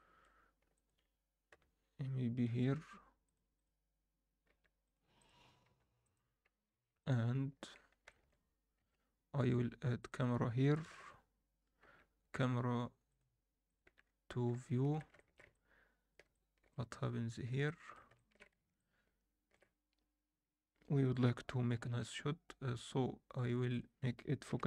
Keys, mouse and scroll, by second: 0.7 middle click, 1.5 KP_1, 2.6 g, 3.5 click, 4.5 g, 5.1-5.6 drag, 5.6 g, 7.0-7.6 alt+middle drag, 7.7 scroll up 1, 8.0 alt+shift+middle click, 8.7 shift+a, 10.8 ctrl+alt+KP_0, 13.0-13.8 drag, 13.8 n, 14.0-14.5 scroll up 3, 14.6-15.0 shift+middle drag, 15.1 ctrl+alt+middle click, 15.5-16.1 middle drag, 16.3-16.7 shift+middle drag, 16.9-17.5 alt+middle drag, 17.6 alt+shift+middle click, 18.1 ctrl+middle click, 18.7-19.5 shift+middle drag, 23.7-24.6 drag.